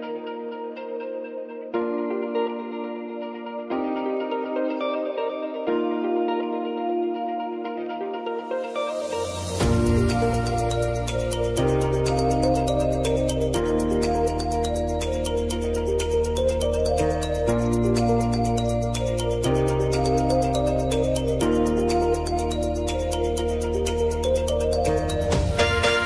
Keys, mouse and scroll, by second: 0.3 space, 2.2 -, 2.9 space, 7.1 space, 7.8 click, 9.5 typing, 10.2 click, 11.4 [, 12.2 click, 13.4 [, 14.1 click, 15.5 [, 16.3 click, 17.4 [, 18.2 click, 19.3 [, 21.8-26.0 drag.